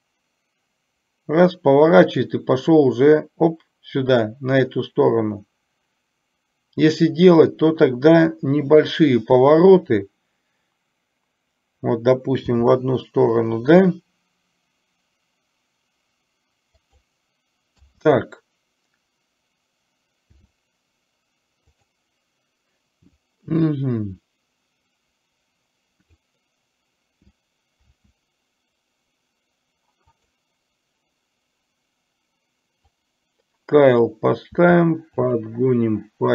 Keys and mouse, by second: 12.6 r, 20.5 r, 23.9-26.4 drag, 28.0 s, 33.0-34.3 drag, 34.6 s.